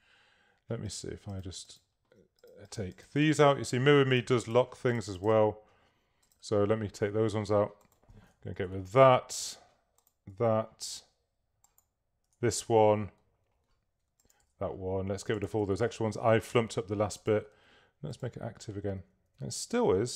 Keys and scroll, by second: 8.6 BackSpace, 10.3 BackSpace, 12.3 BackSpace, 14.5 BackSpace, 15.8 BackSpace, 19.5 super+z.